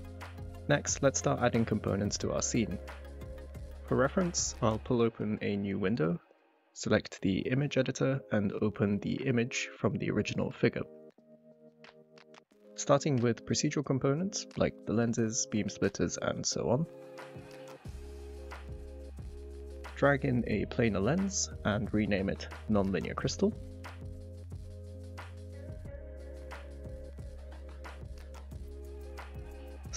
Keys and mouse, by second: 0.0 click, 3.0 click, 5.1-6.9 drag, 12.1-13.4 drag, 15.8 middle click, 17.7-18.0 middle drag, 18.2 click, 19.0 x, 21.8 click, 23.9 shift+middle click, 24.9 click, 25.0-29.9 drag.